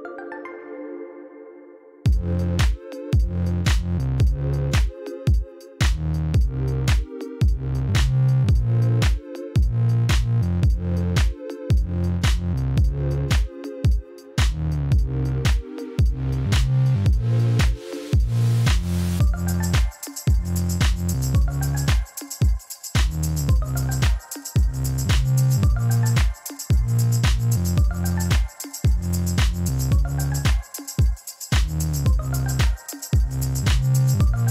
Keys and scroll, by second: 0.3 b, 1.7 shift+a, 2.1 n, 2.2 o, 2.3 s, 8.3 4, 8.4 Return, 14.5 g, 14.6 z, 16.6 5, 16.9 Return, 17.5 shift+d, 18.1 shift+z, 19.4 2, 19.5 Return, 21.3 a, 22.2 Return, 23.2 shift+d, 23.4 shift+z, 28.9 g, 30.5 g, 30.7 shift+z, 31.8 g, 31.9 z, 33.1 alt+a.